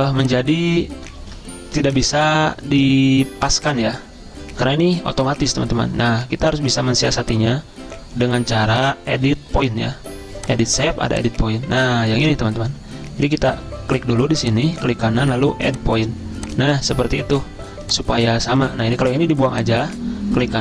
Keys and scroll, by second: 1.4 ctrl+z.